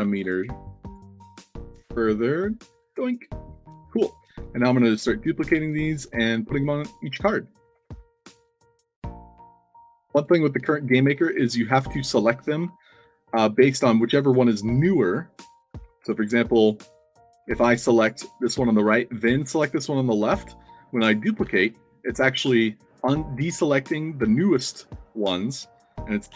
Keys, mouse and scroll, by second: 0.0-0.4 typing, 1.4 shift+click, 2.3 click, 3.4 alt+click, 3.6 d, 3.9 space, 4.0 s, 4.5 alt+click, 5.2-6.5 typing, 7.7 ctrl+z, 8.5 w, 9.0 space, 9.6 click, 10.1 click, 10.9 shift+click, 11.6 ctrl+d, 12.0 s, 16.0 ctrl+z, 16.5 click, 17.4 middle click, 17.4 s, 19.1 shift+click, 21.4 ctrl+d.